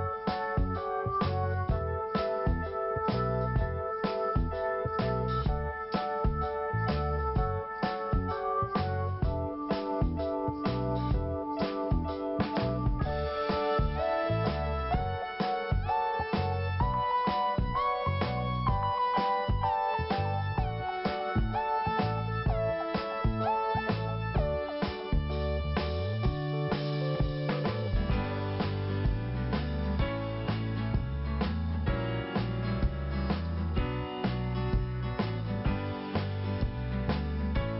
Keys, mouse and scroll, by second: 15.3 scroll down 1, 16.1 p, 17.3 click, 20.0 scroll down 1, 20.5 scroll up 1, 22.2 click, 22.6 right click, 22.7 double right click, 23.3 click, 23.6 click, 24.8 click, 25.5 click, 26.6 click, 27.4 click, 28.2 click, 28.8 click, 29.8 click, 30.5 click, 32.2 click, 32.8 click, 34.4 click, 35.1 click, 35.4 click, 36.7 right click, 37.2 scroll down 1.